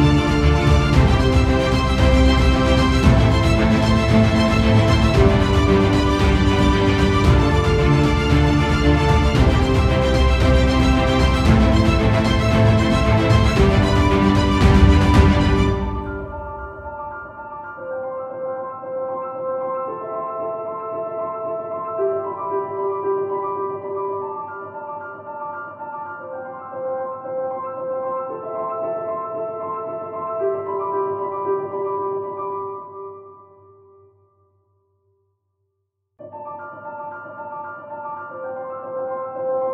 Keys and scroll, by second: 3.9 ctrl+alt+z, 7.7 ctrl+alt+z, 13.6 ctrl+=, 19.4 alt+space, 21.5 ctrl+alt+z, 22.0 space.